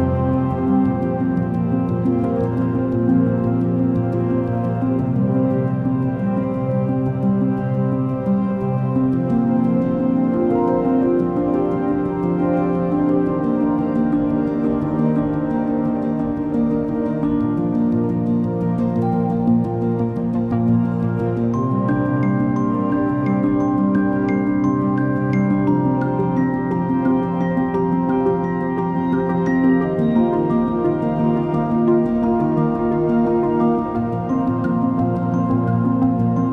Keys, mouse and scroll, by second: 1.5-2.2 drag, 2.2-3.4 middle drag, 3.4-7.0 drag, 7.0 scroll down 5, 7.5-8.9 middle drag, 8.9-13.6 drag, 14.3 scroll down 6, 15.5-15.8 drag, 17.1-20.2 drag, 21.0 click, 22.8 click, 25.5-28.5 drag, 29.5-33.8 drag, 33.8 KP_3, 34.5 Tab, 35.0 scroll up 4, 35.5-36.5 middle drag.